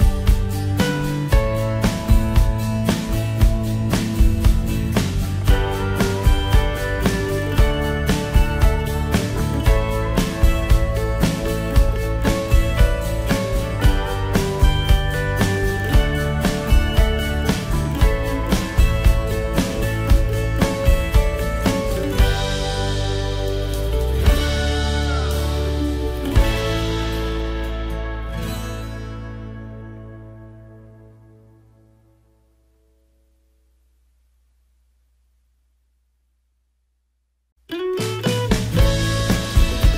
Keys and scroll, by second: 19.5 ctrl+0.